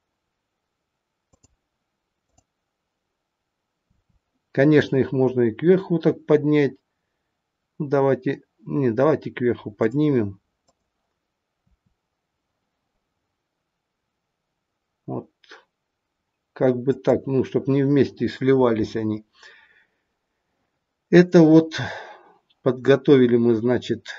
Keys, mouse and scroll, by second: 2.2 click, 3.9 r, 10.6 click, 11.9 r.